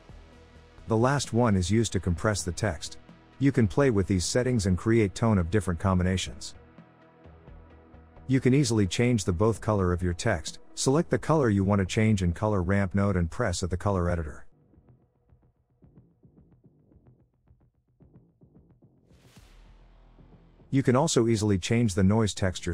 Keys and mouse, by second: 1.5-4.1 drag, 7.0 s, 10.7 middle click, 12.5 click, 15.4 click, 20.4 middle click.